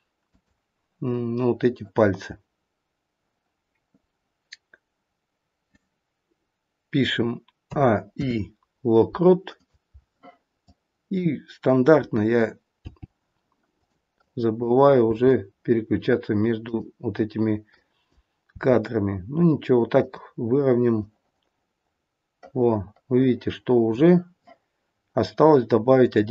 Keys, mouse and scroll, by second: 7.7 a, 8.1 i, 10.6 click, 12.8 g, 14.1 click, 15.0 g, 17.7 click, 18.6 g, 21.0 click, 25.9 click.